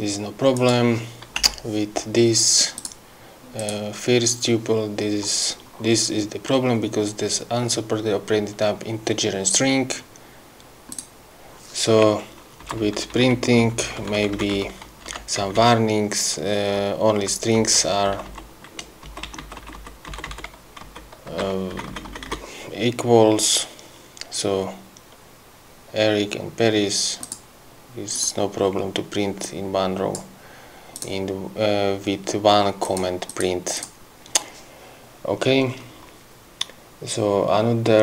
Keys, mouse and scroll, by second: 0.8 click, 1.6 BackSpace, 3.0 click, 3.8 click, 11.1 click, 12.9 Left, 13.8 Right, 15.3 Home, 15.6 Right, 17.7 Right, 18.3 Left, 19.2 Left, 21.1 Right, 21.6 2, 22.0 Right, 27.5 click, 28.4 click, 29.7 click, 31.3 click, 33.1 click, 33.6 click, 34.1 click.